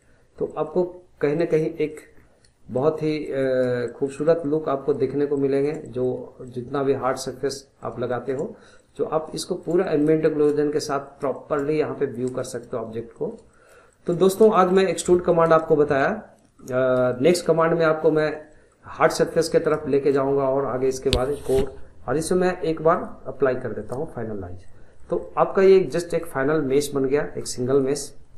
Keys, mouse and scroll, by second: 0.3 scroll down 1, 0.5-0.9 middle drag, 0.9-1.4 scroll up 2, 1.4-1.9 middle drag, 1.9 drag, 2.2 scroll down 1, 2.7-3.7 shift+middle drag, 3.7 scroll up 1, 3.8-5.1 shift+middle drag, 5.1 scroll up 2, 5.3-6.2 shift+middle drag, 6.2 scroll up 2, 6.4 middle click, 7.3 scroll down 2, 7.5-9.1 middle drag, 9.1 scroll down 1, 9.4-10.6 shift+middle drag, 10.6 scroll down 1, 10.9-11.7 middle drag, 11.7 scroll down 1, 11.9-15.3 middle drag, 15.3 scroll down 1, 15.6-16.8 shift+middle drag, 16.8 scroll up 1, 17.1-18.9 shift+middle drag, 18.9 scroll up 1, 19.2-22.9 shift+middle drag, 22.9-24.7 drag, 24.7-27.7 middle drag, 27.7 click, 28.0 scroll down 1, 28.2-28.3 middle drag.